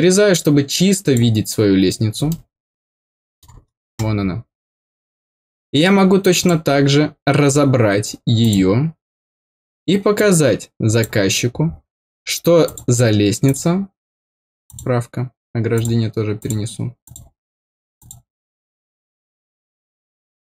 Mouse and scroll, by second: 2.2-3.4 middle drag, 4.0 scroll down 4, 6.3 click, 8.4 click, 10.1 click, 12.6 click, 13.4 click, 14.6 click, 15.7 click, 16.3 click, 17.0 click, 17.9 click.